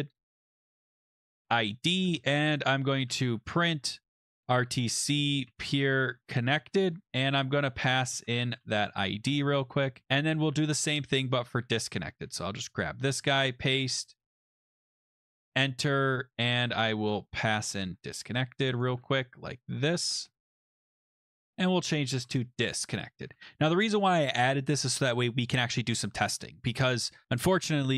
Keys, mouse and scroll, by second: 0.0-9.0 typing, 9.8 Left, 10.0 Right, 11.9 click, 12.3 ctrl+c, 12.9 click, 13.2 ctrl+v, 14.2 click, 15.2 click, 15.4 Return, 17.4 click, 17.6 click, 18.1 ctrl+c, 18.8 click, 19.0 click, 19.0 ctrl+v, 19.6 click, 19.8 click, 20.0 ctrl+v, 21.3 click, 21.5 click, 21.9-23.2 typing, 23.2 ctrl+s, 25.2 click, 25.5 BackSpace, 25.6 BackSpace.